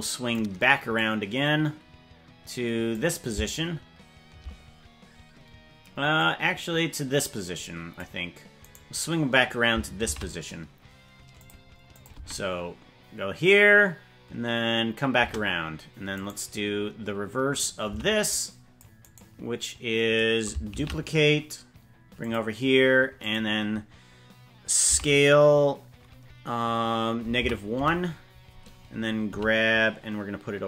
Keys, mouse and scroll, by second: 0.9-3.0 drag, 6.1-7.9 drag, 8.6 right click, 10.0 shift+d, 11.9 click, 12.2 space, 15.2 space, 16.2 right click, 18.0 c, 20.8 shift+d, 23.2 click, 25.0 s, 29.4 g.